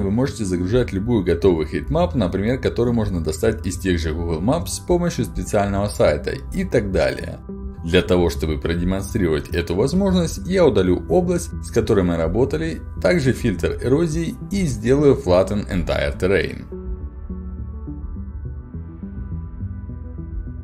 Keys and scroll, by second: 11.5 Return.